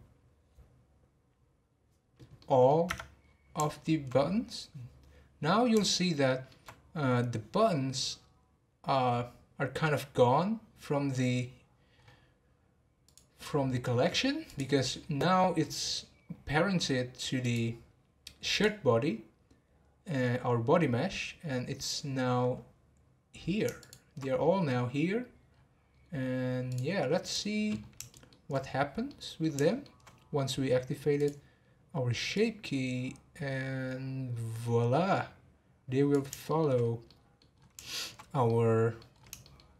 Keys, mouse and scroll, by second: 1.7-2.4 scroll down 1, 2.4 middle click, 2.9 Tab, 3.2 scroll down 2, 3.7-5.4 shift+middle drag, 5.4-5.8 scroll down 3, 5.8-9.2 shift+middle drag, 12.0-13.0 scroll up 3, 13.0 click, 14.5 click, 17.4 click, 18.5 click, 19.5-20.3 scroll down 2, 21.8 click, 23.8 shift+click, 25.1-25.5 scroll down 2, 26.7 click, 27.2 scroll up 1, 27.2 click, 27.8 scroll down 1, 28.1-28.6 shift+middle drag, 28.6 scroll down 2, 29.0-30.5 middle drag, 30.5-31.2 scroll down 4, 31.2 click, 32.3-35.3 drag, 36.4-36.8 shift+middle drag, 36.8 scroll up 2, 37.1-37.5 middle drag, 37.5-37.8 scroll up 1, 37.8-38.2 shift+middle drag, 38.2 scroll down 1, 38.4-39.1 middle drag, 39.1 scroll up 2, 39.4-39.7 shift+middle drag.